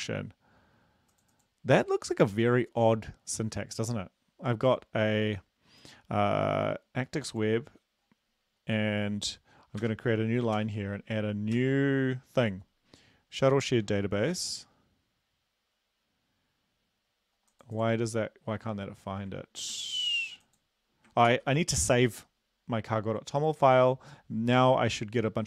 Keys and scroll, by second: 9.8 Return, 10.6 ctrl+v, 11.6 ctrl+s, 19.7 ctrl+s, 21.3 ctrl+s.